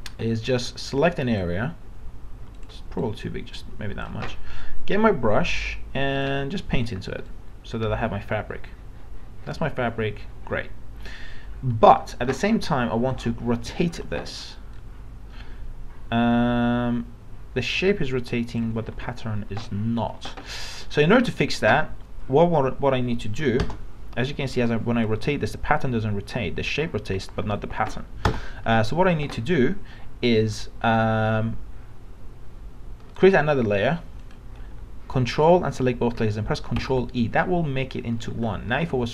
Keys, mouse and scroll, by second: 0.1 alt+scroll down 1, 0.7-6.2 drag, 6.2 right click, 6.9-12.1 drag, 12.3 ctrl+d, 13.1 click, 13.9 ctrl+t, 14.7-18.6 drag, 18.8 ctrl+z, 23.7 Return, 24.5 ctrl+t, 25.1-27.3 drag, 27.4 ctrl+z, 28.3 ctrl+Return, 34.2 click, 36.8 ctrl+e, 38.7 ctrl+t.